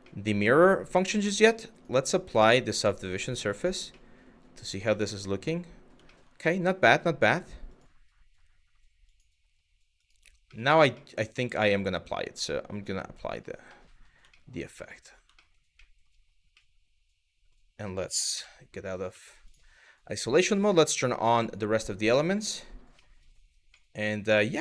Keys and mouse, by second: 0.1 click, 0.6 middle drag, 1.3-3.2 drag, 3.6-3.9 middle drag, 4.5 shift+middle drag, 5.2-5.5 middle drag, 5.8 shift+middle drag, 7.3 click, 8.7 click, 9.6 click, 10.2 middle click, 10.7-11.3 middle drag, 12.0-13.0 drag, 13.4 middle drag, 14.0 shift+middle drag, 14.5 middle drag, 15.0 shift+middle drag, 15.4 middle drag, 16.3-17.1 middle drag, 18.0 KP_Divide, 18.8 middle drag, 21.0 click, 21.3 click, 22.7 middle drag, 23.4-24.4 middle drag.